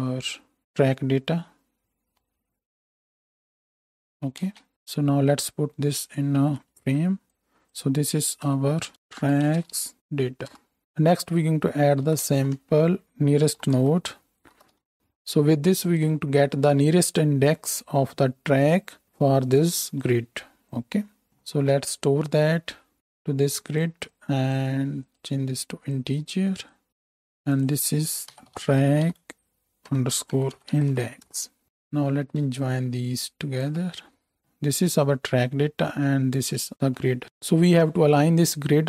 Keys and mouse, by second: 4.6 space, 6.7 ctrl+j, 8.4 F2, 10.0 a, 10.1-12.0 drag, 10.1-12.0 middle drag, 10.1-12.0 right drag, 10.8 BackSpace, 16.0-17.2 drag, 21.4 shift+a, 23.7-24.1 drag, 34.4-37.2 drag, 37.2-38.8 middle drag.